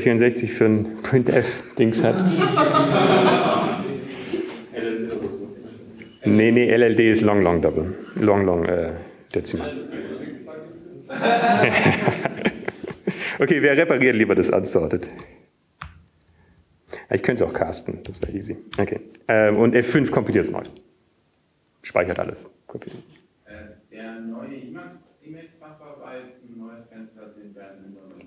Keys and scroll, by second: 0.0-0.1 typing, 1.5-2.2 typing, 17.6-18.3 typing, 19.5 Right, 21.0 Right, 21.0 BackSpace, 22.3 F5.